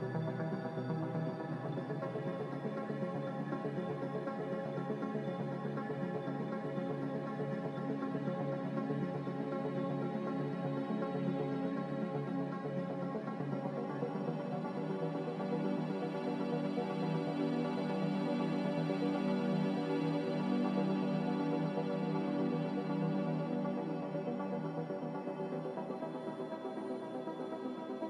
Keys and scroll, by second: 4.7 z, 16.0 a.